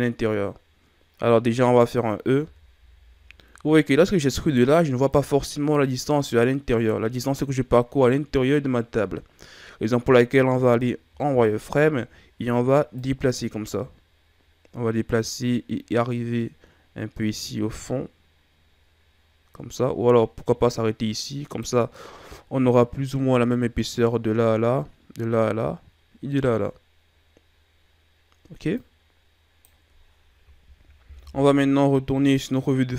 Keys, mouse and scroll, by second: 2.3 e, 11.0 z, 12.0-12.9 scroll up 1, 12.9 click, 28.7 click, 31.1 KP_1.